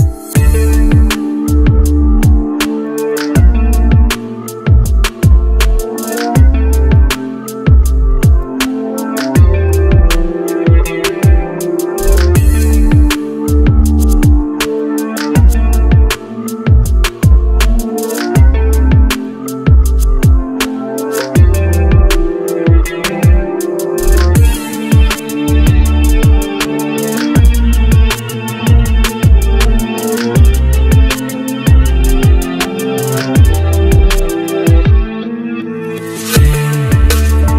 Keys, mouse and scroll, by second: 0.0 scroll, 0.3 shift+Page_Down, 8.7-9.2 scroll down 1, 9.6-10.0 scroll up 1, 21.2-22.0 scroll, 22.8 shift+click, 26.5 c, 29.4 scroll down 1, 33.1 c.